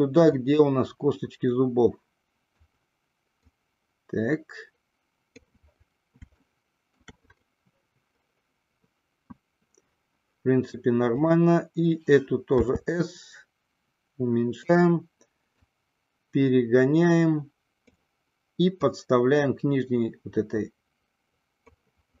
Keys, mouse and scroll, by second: 0.3-2.7 drag, 3.6-5.6 drag, 6.6-7.2 shift+middle drag, 11.1 click, 12.7 s, 14.9 click, 15.6-18.1 drag, 19.0-21.9 drag.